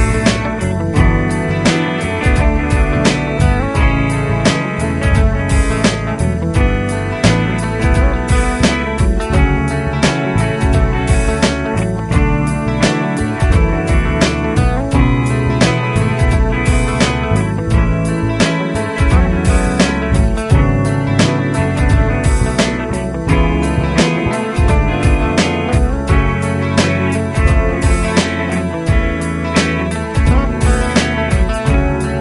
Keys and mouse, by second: 9.2 shift+\, 12.2 |, 15.8 |, 16.5 t, 16.9 |, 30.8 shift+click.